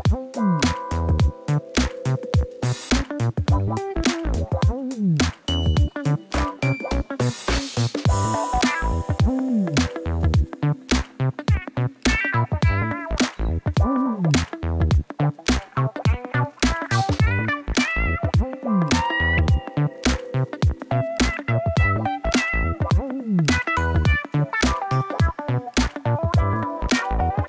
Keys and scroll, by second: 0.8 u, 4.1 Tab, 7.7 shift+a, 8.7 b, 9.0 u, 9.2 m, 11.6 shift+a, 12.6 n, 13.5 o, 13.6 i, 18.9 ctrl+t.